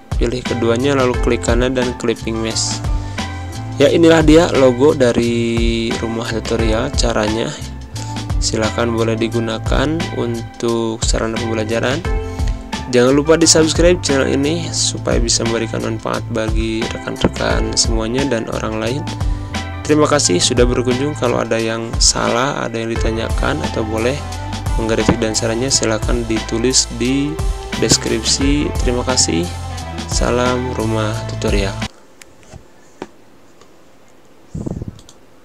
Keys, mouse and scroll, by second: 1.0 right click, 1.7 click, 3.0 z, 4.5-7.5 drag, 8.6 shift+click, 9.8 Up, 12.0 click, 12.9 space, 13.1 click, 13.3 space, 15.1 Pause, 15.9 space, 16.0 click, 16.3 space, 17.3 click, 18.6 ctrl+f, 19.8-21.3 drag, 21.7 z, 21.9-24.2 drag, 24.2 space, 24.4 click, 24.6 space, 25.3 v, 25.8-32.0 drag, 32.0 z, 32.4 click, 33.0 space, 33.1 click, 33.4 space, 33.8 space, 35.0 click.